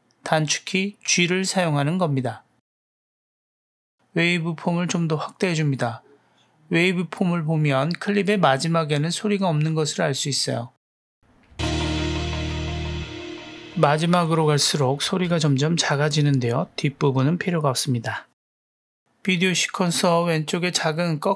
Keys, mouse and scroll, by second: 0.1 g, 3.4-4.2 drag, 5.2 ctrl+middle click, 6.8-7.3 drag, 10.2 drag, 11.5 space, 15.1 space, 18.7 click.